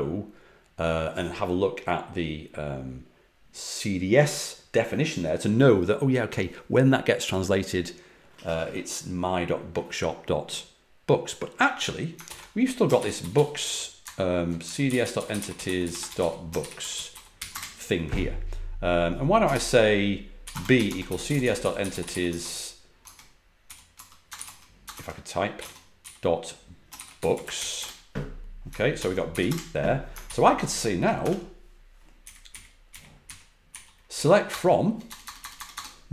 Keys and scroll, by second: 12.2 ctrl+l, 12.7-17.8 typing, 19.4 ctrl+l, 20.1-28.0 typing, 28.9 ctrl+l, 29.2 b, 29.4 Return, 30.2 ctrl+l, 31.1 Escape, 32.1 Up, 32.4 Up, 32.8 Up, 33.2 Up, 33.6 Left, 34.1 Left, 34.4 BackSpace, 34.7 BackSpace.